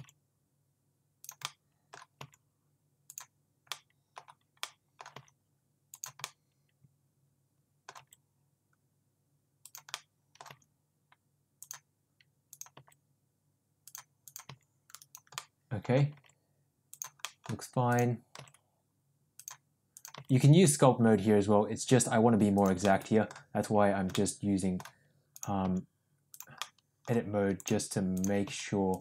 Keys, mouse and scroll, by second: 0.0 g, 1.6 middle click, 2.3 g, 3.8 middle click, 4.8 middle click, 5.2 g, 6.3-7.9 middle drag, 8.0 g, 10.0 middle click, 10.5 g, 12.8 g, 14.3 click, 14.5 g, 15.4 middle click, 16.2 g, 17.3 middle click, 18.4 g, 20.2 g, 23.0 middle click, 24.2 middle click, 25.7 g, 26.7 middle click, 27.6 click, 28.2 click, 28.5 g.